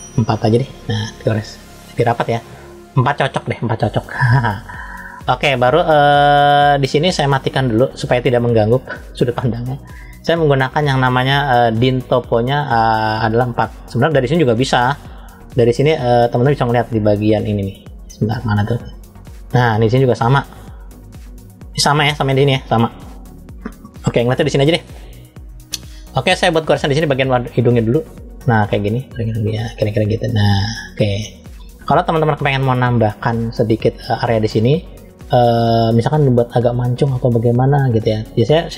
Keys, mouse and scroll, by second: 1.1 click, 2.9 click, 7.1-9.4 drag, 11.4-13.4 drag, 15.6 click, 17.5 click, 18.3 click, 19.5-21.0 scroll down 4, 21.0 click, 27.4 click, 31.2-31.7 scroll up 1, 31.7 scroll up 1, 31.8-33.0 middle drag, 35.4-35.8 scroll down 2, 35.9 middle click.